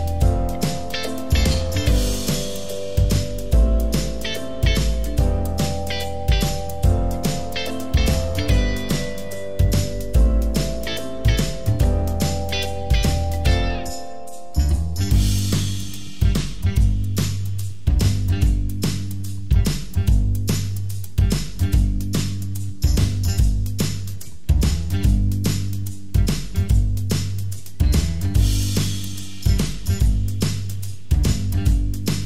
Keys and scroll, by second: 21.5 ctrl+d, 22.7 ctrl+d.